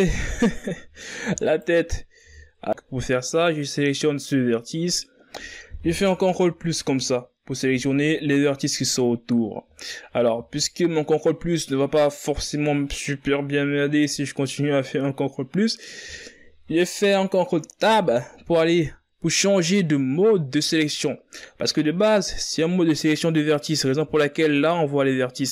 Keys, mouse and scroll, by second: 0.1 z, 2.7 z, 3.5 right click, 6.4 ctrl+KP_Add, 7.9 z, 9.8 z, 10.5 z, 16.2 z, 18.0 ctrl+Tab.